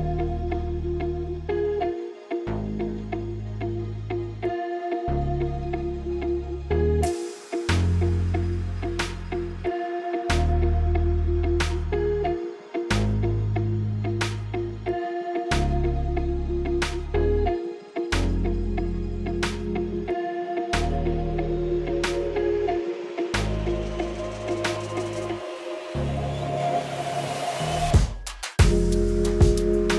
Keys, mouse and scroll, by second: 0.3 click, 2.3 shift+d, 6.4 click, 9.1 click, 10.5 click, 12.4 click, 15.9 click, 18.5 click, 25.3 click.